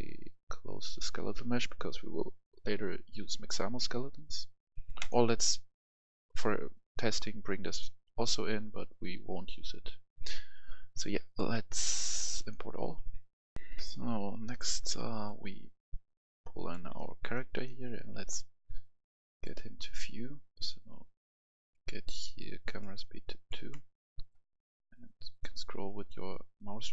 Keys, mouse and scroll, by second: 13.6 F10, 15.3 click, 17.0-19.2 right drag, 17.0 w, 17.1 d, 19.3 click, 22.0-23.7 drag, 23.7 right click, 23.9 w, 24.4 w, 24.6-24.9 scroll up 1, 25.2 right click, 25.6 scroll up 1, 26.3-26.9 scroll up 1.